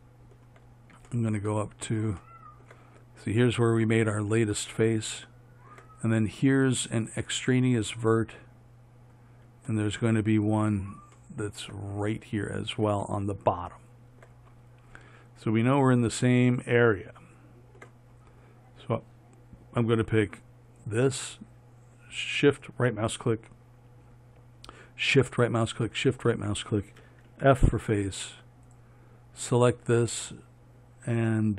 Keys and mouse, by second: 27.7-31.5 drag, 27.7 f.